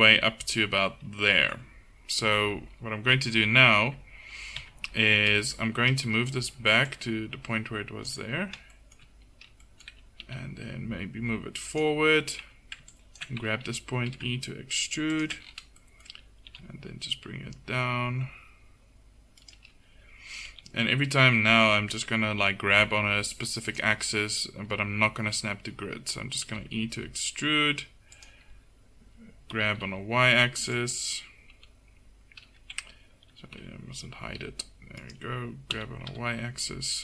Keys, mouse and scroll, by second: 3.9 Tab, 4.6 Tab, 10.3 g, 12.5 a, 14.1 e, 16.5 g, 20.5 g, 26.5 e, 29.6 g, 30.8 click, 31.6 h, 33.6 alt+h, 33.6 alt+j, 34.3 g, 35.8 g.